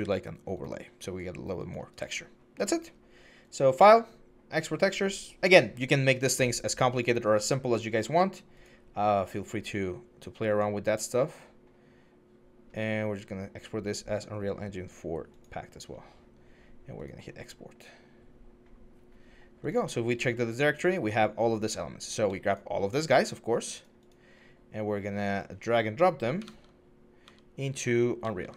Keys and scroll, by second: 26.3 alt+Tab.